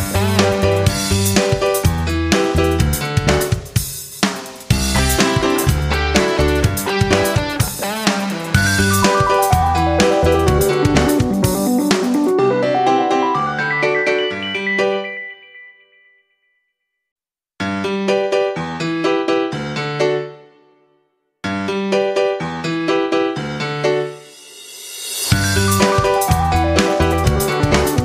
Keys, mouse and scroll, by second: 0.3 shift+click, 1.3 click, 5.7 shift+click, 10.1 F9, 10.5 click, 12.2 click, 19.3 shift+Down, 21.1 click, 26.0 ctrl+click.